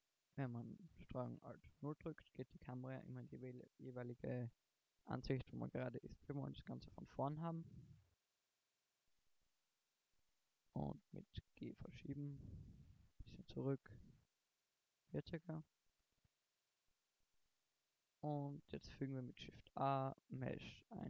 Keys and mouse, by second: 1.8 ctrl+alt+KP_0, 6.4 KP_1, 8.0 ctrl+alt+KP_0, 10.2 g, 11.8 click, 11.9 g, 13.4 g, 15.9 KP_1, 17.4 a, 18.2 shift+a.